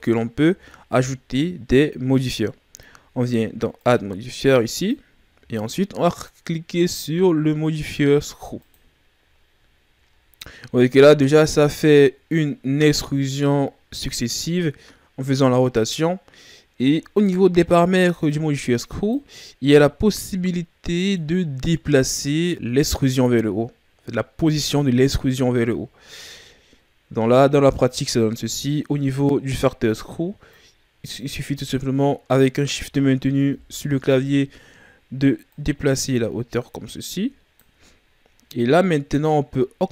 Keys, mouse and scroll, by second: 0.5 Tab, 3.7 click, 4.7 click, 9.6-10.6 ctrl+scroll down 6, 10.6-11.3 ctrl+scroll up 1, 11.3-18.2 middle drag, 18.2 click, 20.5-22.5 middle drag, 30.5 click, 33.5 KP_1, 35.5 click, 38.5-39.9 shift+scroll up 2.